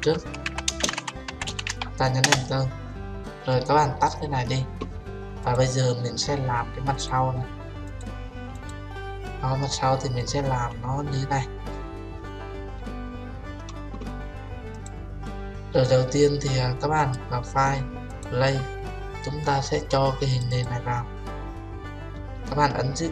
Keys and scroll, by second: 2.3 Return.